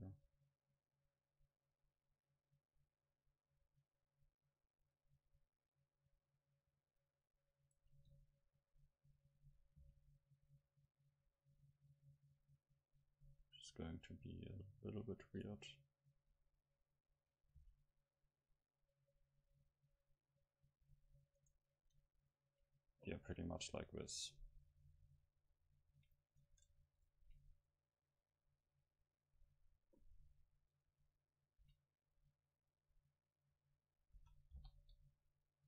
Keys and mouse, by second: 7.7-9.7 drag, 8.5 middle click, 9.7 middle click, 9.8 c, 10.1 middle click, 15.4-17.5 drag, 15.8-17.9 middle drag, 17.6 c, 21.5-23.8 right drag, 23.8 middle click, 24.3 click, 26.5 Tab, 27.9 middle click, 30.9 Tab, 31.6 a, 32.5-35.4 drag, 34.2 s.